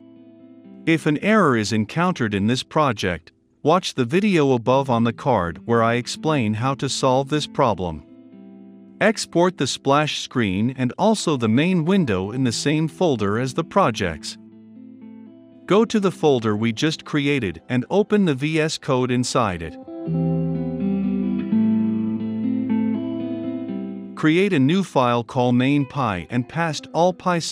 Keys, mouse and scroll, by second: 12.0-19.7 drag, 19.7-20.5 right drag, 20.5-22.5 drag, 22.6 ctrl+c, 23.2-24.6 drag, 24.6-25.2 right drag, 25.2 click, 25.6-27.0 typing.